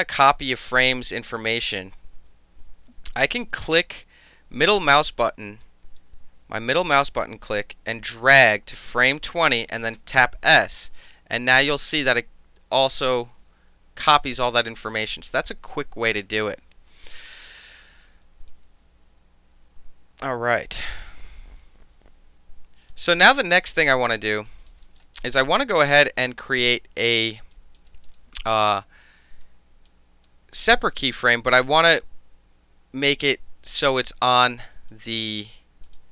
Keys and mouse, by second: 9.4-11.0 middle drag, 10.0 s, 11.0-13.2 drag, 13.2-18.5 middle drag, 18.5-22.9 drag, 22.9 middle click, 23.4 alt+right click, 23.7 alt+click, 24.1 alt+right drag, 24.5 alt+drag, 25.0 alt+right drag, 25.2-25.6 alt+drag, 27.5 alt+drag, 27.9 alt+right drag, 28.2-29.0 alt+drag, 29.0 alt+middle click, 29.4-29.9 alt+drag, 29.9 alt+middle click, 30.3-30.9 alt+drag, 30.9 alt+middle click, 31.1 alt+drag, 31.3 alt+middle drag, 31.5-31.9 alt+right drag, 34.9 alt+drag, 35.9 click.